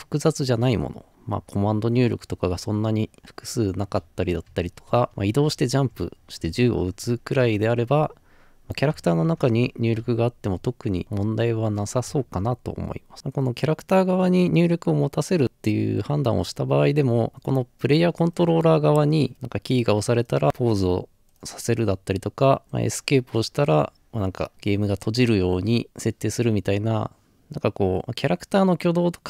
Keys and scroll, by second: 2.8 typing, 6.7-7.9 typing, 9.8-10.6 typing, 11.8-12.6 typing, 19.3 z, 20.4 typing, 22.6 Escape, 24.5 Return, 24.5 typing.